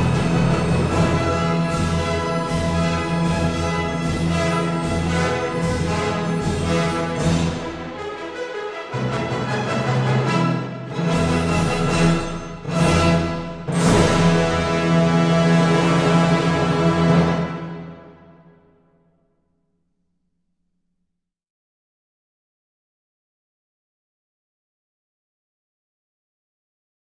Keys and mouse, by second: 1.4 g, 1.5 z, 3.7 shift+click, 8.1 Tab, 8.6 ctrl+r, 10.3 click, 10.4 Tab, 11.5 KP_1, 12.2 shift+d, 12.5 click, 12.9 g, 13.9 x, 15.5 click, 16.8 shift+d, 17.2 click, 17.5 g, 18.0 x, 20.3 click, 24.0 middle click, 26.5 middle click.